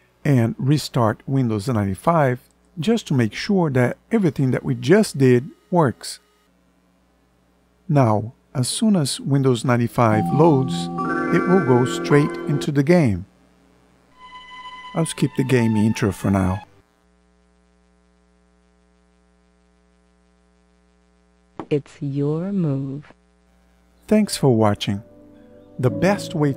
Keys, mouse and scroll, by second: 15.8 Escape.